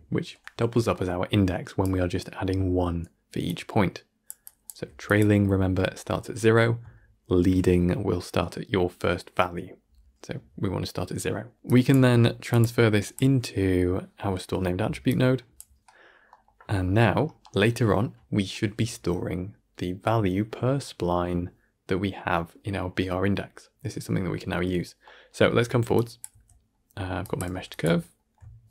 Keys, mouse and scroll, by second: 3.3-4.5 drag, 7.1 click, 11.5 drag, 15.0-15.5 drag, 25.1 click, 25.8 click, 28.6 alt+shift+click.